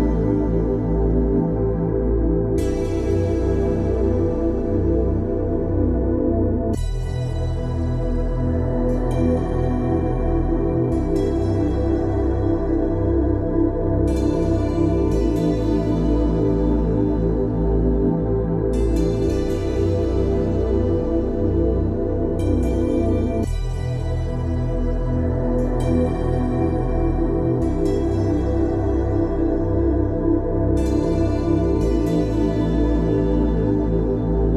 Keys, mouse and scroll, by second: 5.1 d, 7.6-8.4 typing, 10.3 Return, 12.0 click, 17.0 e, 20.4-21.2 typing, 23.5 click, 28.0-29.5 typing, 32.5 e.